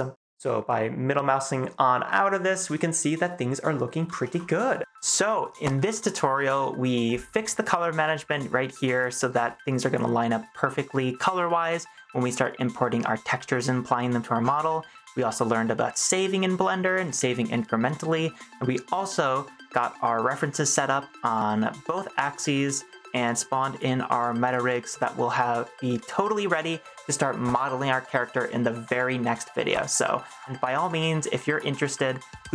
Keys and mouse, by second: 0.6 middle click, 2.4 shift+middle click, 3.0 middle click, 4.1 ctrl+s, 4.7 shift+click, 8.2 click, 15.8-16.6 drag, 19.4-20.8 middle drag, 22.3 middle click, 24.4 click, 24.8 middle drag.